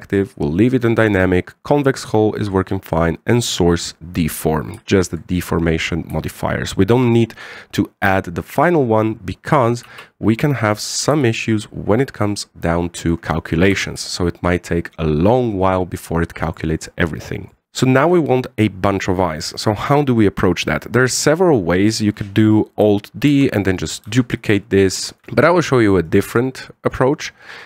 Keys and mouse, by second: 5.7 shift+middle drag, 10.6 alt+a, 11.9 KP_1, 13.8 click, 14.5 z, 14.9 shift+middle drag, 17.2 click, 24.1 alt+d, 24.8 alt+d, 25.2 x, 25.7 right click, 25.9 x, 26.8 right click.